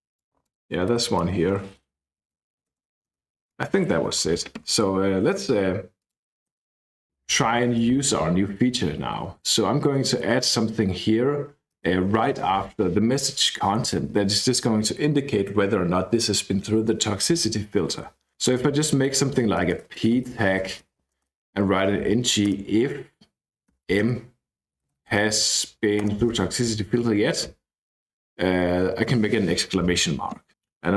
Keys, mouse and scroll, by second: 0.1 click, 0.9 BackSpace, 1.3 BackSpace, 2.1 click, 2.6 Return, 2.8 Return, 3.4-4.0 scroll down 1, 4.0-5.3 scroll up 1, 5.9 click, 6.4 space, 7.1 z, 7.9 <, 11.8 BackSpace, 13.2 <, 18.3-22.5 typing, 21.0 Left, 22.8 Return, 23.7-25.8 typing, 26.0 Return, 26.7 Right, 26.9 Right, 29.0 shift+1, 30.5-30.9 drag.